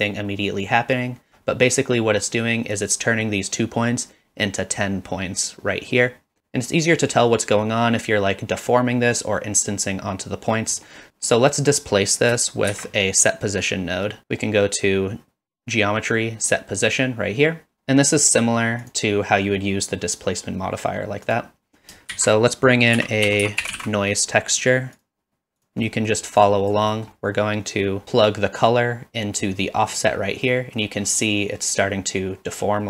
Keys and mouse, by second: 10.7 middle click, 11.1 shift+a, 12.7 shift+a, 18.8-21.0 drag, 21.3 click, 22.1 shift+a, 26.0 middle click, 26.4 click, 27.0 middle click, 28.3-29.4 drag, 29.7 middle click, 30.5-30.8 middle drag, 31.3-32.8 middle drag.